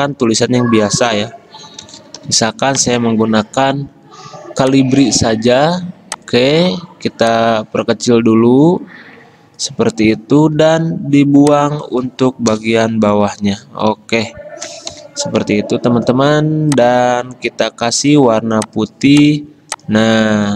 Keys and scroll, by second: 1.7-2.8 typing, 10.7 t, 12.6 BackSpace, 14.0 ctrl+shift+Down, 15.1 Delete, 17.4 d.